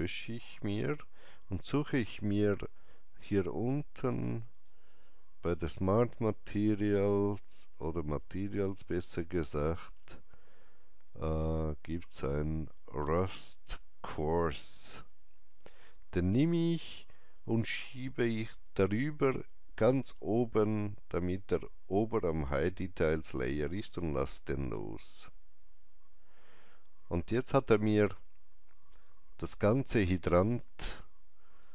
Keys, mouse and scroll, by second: 2.3 scroll down 1, 4.4 click, 5.9 scroll down 1, 8.5 click, 8.5 scroll down 1, 9.6 scroll down 1, 16.3-25.8 drag, 16.3 scroll down 1, 27.7-31.3 drag, 27.7-28.2 scroll down 1.